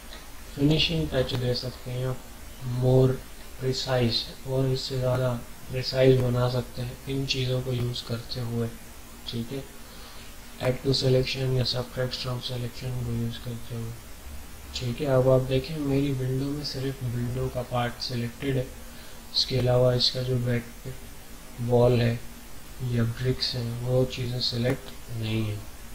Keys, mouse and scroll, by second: 0.0 scroll up 1, 0.2 typing, 1.0-2.4 ctrl+scroll up 4, 3.1 ctrl+scroll up 1, 4.2 alt+scroll up 1, 4.9 ctrl+scroll up 1.